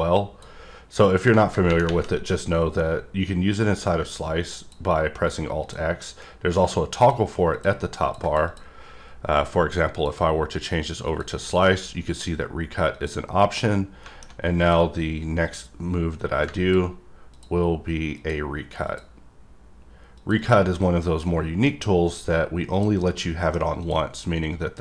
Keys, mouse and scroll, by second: 2.5 click, 5.6 click, 7.0 click, 7.5 click, 8.0 click, 8.2 double click, 8.5 click, 9.9 click, 11.0 click, 12.9 click, 13.5 middle click, 14.6 click, 15.4 click, 17.3 click, 18.1 click, 18.8 click, 20.1 click, 20.3 double click, 20.8 middle click, 22.7 click, 23.0 middle click, 23.8 click, 24.4-24.8 scroll up 2.